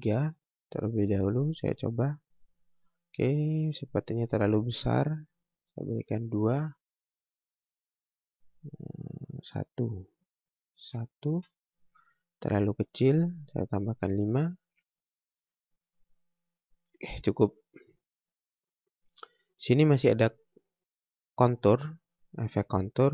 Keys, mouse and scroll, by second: 1.6 click, 4.9 click, 9.8 click, 13.6 click, 21.3 scroll up 1, 22.6 scroll down 1.